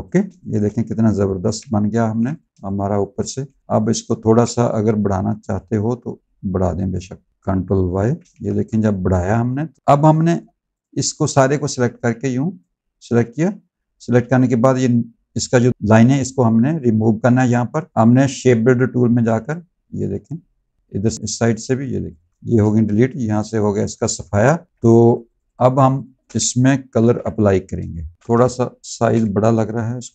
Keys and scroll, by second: 0.2 space, 1.2 ctrl+y, 1.9 z, 2.5 space, 3.2 z, 4.7 v, 7.7 ctrl+y, 8.3 z, 9.8 space, 10.3 v, 22.5 v, 24.3 ctrl+z, 26.2 space, 26.7 ctrl+y, 27.7 space, 28.1 ctrl+z, 28.3 space.